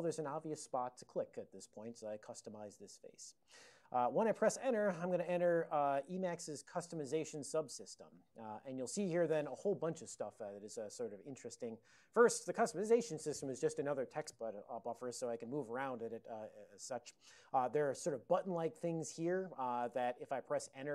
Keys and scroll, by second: 15.1 ctrl+n, 15.2 ctrl+n, 15.4 ctrl+n, 15.6 ctrl+n, 17.6 ctrl+n, 18.2 ctrl+f, 18.4 ctrl+f.